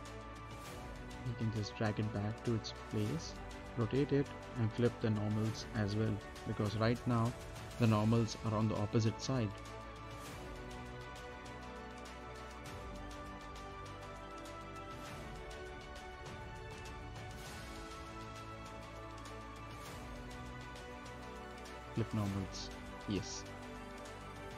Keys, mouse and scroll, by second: 0.5 right click, 1.6 click, 2.8 right click, 3.4 scroll up 1, 3.7 middle click, 5.6-7.0 drag, 7.0 right click, 7.5 scroll down 1, 7.7 middle click, 8.4 right click, 8.8 scroll down 1, 9.3 middle click, 9.9 right click, 10.3 middle click, 11.1 right click, 12.2-14.5 drag, 14.8 right click, 15.9 click, 18.0 right click, 18.7 middle click, 19.0 right click, 19.8 click, 20.2 right click, 22.0 click, 23.1 right click, 24.2 middle click.